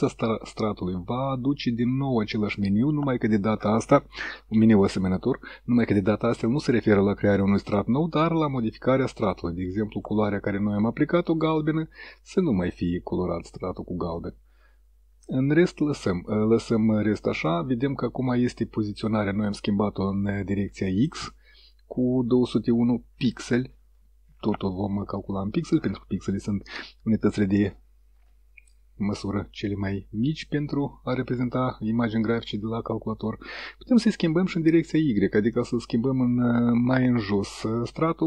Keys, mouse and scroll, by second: 1.3-2.2 drag, 12.6 click, 16.6-17.9 drag, 29.1 click, 34.6 click, 37.0 click.